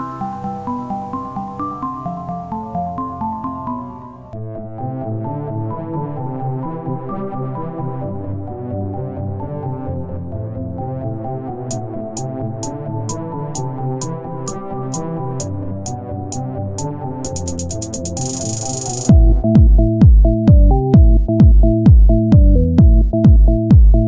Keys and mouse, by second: 0.0 ctrl+Tab, 0.6 click, 1.8 right click, 3.6 z, 5.4 r, 6.7 e, 7.7 z, 8.5-9.9 drag, 10.2 e, 12.3 click, 16.4 z, 19.0 r, 19.6 z, 22.3 e, 23.9-24.0 drag.